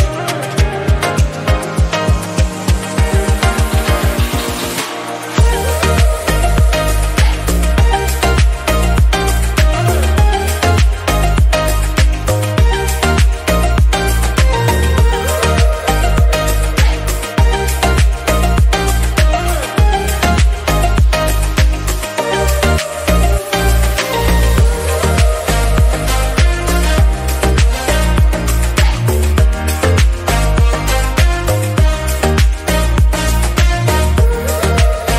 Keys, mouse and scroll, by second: 1.0 shift+d, 2.1 p, 2.9 Tab, 3.2 click, 3.6 middle click, 4.1 KP_Decimal, 4.6-5.8 scroll down 7, 5.1 middle click, 5.8-6.4 middle drag, 6.4-7.1 scroll up 1, 7.1 /, 7.5-7.9 middle drag, 7.9 scroll down 3, 8.0 middle click, 8.4 Tab, 9.0 Tab, 10.3 a, 10.5-15.3 middle drag, 15.3 e, 16.5 ctrl+z, 16.9 middle click, 17.2 g, 18.2 /, 18.4 middle click, 18.7-19.0 scroll up 1, 19.0 middle click, 19.7 scroll down 2, 19.9 middle click, 20.5 /, 20.8 middle click, 21.5-22.0 scroll down 1, 22.0 1, 22.5 2, 23.0 click, 23.4 shift+click, 23.9 e, 25.5 scroll down 1, 25.6 shift+middle click, 25.9 a, 26.1 a, 26.3 middle click, 26.8 q, 29.1 click, 29.6-31.3 shift+drag, 31.4 Tab, 31.6 scroll down 2, 31.7 middle click, 32.2 /, 32.6-33.3 middle drag, 33.3 click.